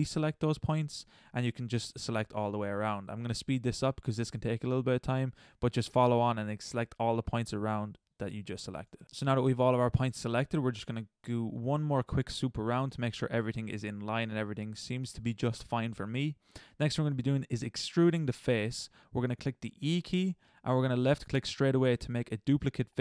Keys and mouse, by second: 0.0 middle click, 0.3 c, 2.0 c, 2.8 click, 3.0 c, 4.4 c, 7.1 middle click, 7.4 c, 8.5 middle click, 9.0 ctrl+z, 9.3-19.9 middle drag, 19.9 e.